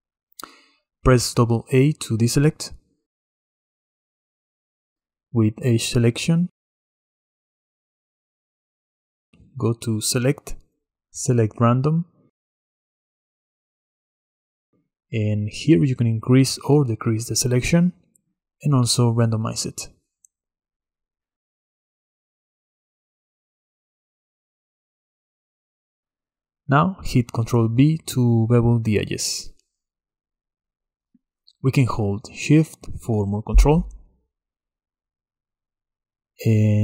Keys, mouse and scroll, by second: 3.3 a, 3.5 a, 6.5 click, 8.5-10.6 middle drag, 10.6-13.8 drag, 15.8-17.1 drag, 17.1-20.7 middle drag, 20.7 click, 22.8 shift+click, 24.3-25.1 drag, 25.4 click, 27.0 ctrl+b, 31.4 right click, 33.1 right click, 35.6-36.8 drag.